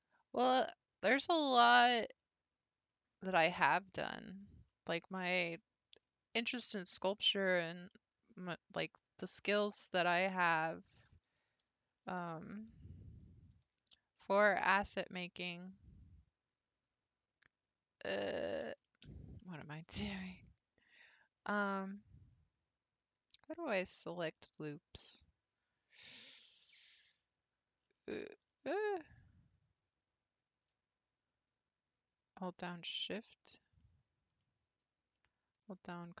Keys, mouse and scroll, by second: 3.7 scroll up 2, 4.3-6.6 middle drag, 6.6-7.6 scroll up 1, 7.6 2, 8.4 click, 11.6 2, 12.0 3, 12.3 click, 13.6 i, 15.0 g, 18.7 ctrl+z, 19.1 ctrl+z, 23.7-27.8 shift+middle drag, 28.3 ctrl+e, 33.0 shift+click, 34.4-36.2 middle drag.